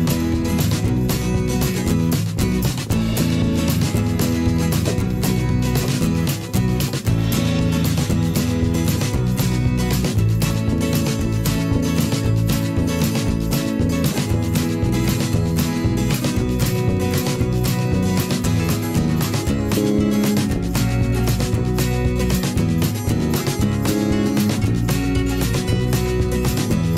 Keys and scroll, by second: 1.8 a, 9.3 v.